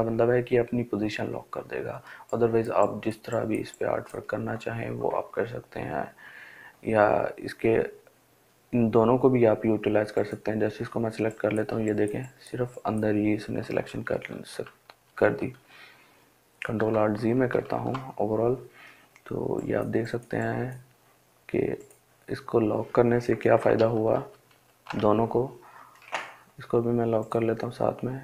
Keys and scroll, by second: 13.4 ctrl+alt+z, 23.1 ctrl+alt+z.